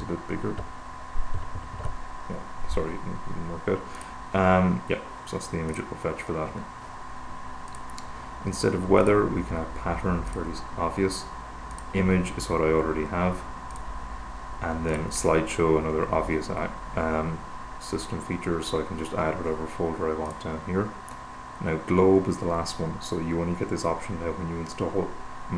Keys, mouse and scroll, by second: 4.2 click, 6.0 click, 8.0 click, 9.4 click, 10.5 click, 12.0 click, 14.0 click, 15.2 click, 20.7 click, 24.4-25.5 drag.